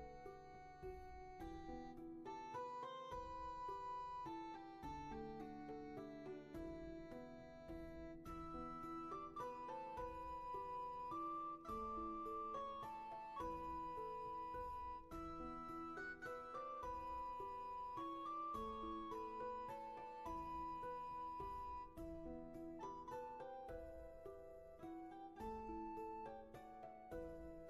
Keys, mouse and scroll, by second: 0.2 ctrl+z, 2.9 ctrl+z, 5.5 ctrl+z, 7.3 ctrl+z, 12.6 ctrl+z, 15.3 ctrl+z, 17.6 ctrl+z, 26.7 ctrl+z.